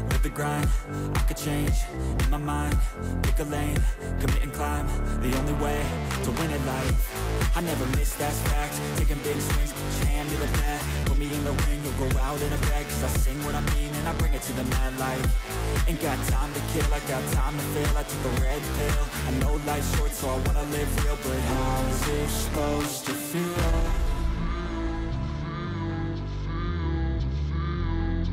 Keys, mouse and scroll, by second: 20.5-21.0 scroll down 2, 22.4 ctrl+=, 22.9 ctrl+=, 23.7 scroll down 5, 24.6 ctrl+=, 26.5 ctrl+j, 28.2 ctrl+z.